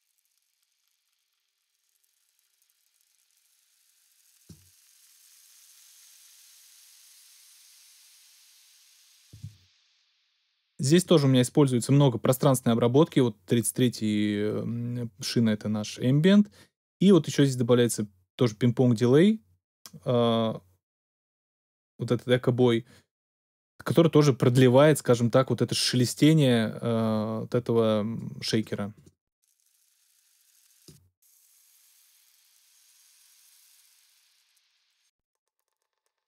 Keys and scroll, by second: 9.3 space.